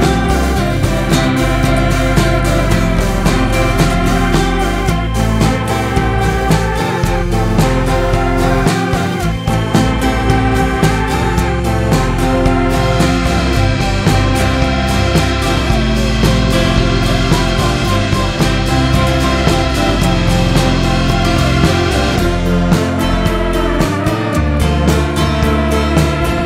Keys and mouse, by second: 0.7-1.9 drag, 3.5-5.0 drag, 6.3-7.1 shift+middle drag, 7.9-8.6 shift+middle drag, 9.5 click, 12.0 click, 14.7-15.1 shift+middle drag, 16.4 KP_7, 24.4-25.5 middle drag.